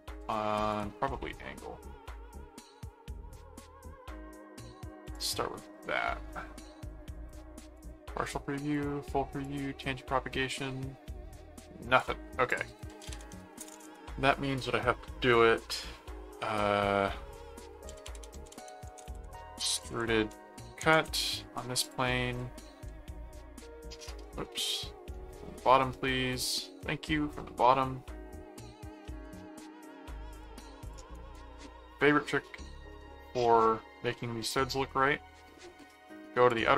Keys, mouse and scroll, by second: 0.7 click, 1.1-3.1 middle drag, 3.4 middle click, 5.0 click, 6.0 middle click, 7.8 click, 8.7 click, 9.4 click, 11.9 click, 12.7-13.8 typing, 12.7 click, 17.6-20.4 typing, 20.9 Return, 21.8 click, 23.3 ctrl+5, 24.2 ctrl+2, 25.0 ctrl+6, 25.4 ctrl+7, 26.1 ctrl+6, 29.1 click, 30.3 click, 31.1 right click, 31.9-32.9 middle drag, 34.1 middle click, 36.5 click.